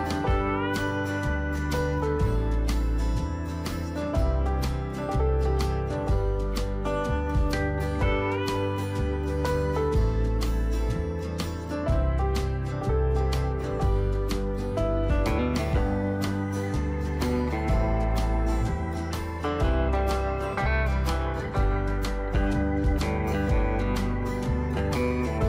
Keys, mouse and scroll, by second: 0.9 click, 1.7 Delete, 3.2 click, 4.2 Delete, 7.5 ctrl+shift+v, 10.1 click, 14.0 right click, 15.6 click, 20.9 Up, 21.3 typing, 24.4-25.4 drag.